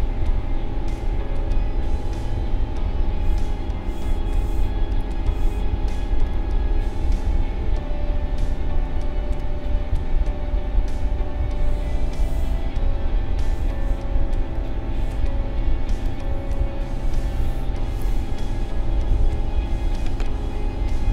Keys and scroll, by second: 19.1 n.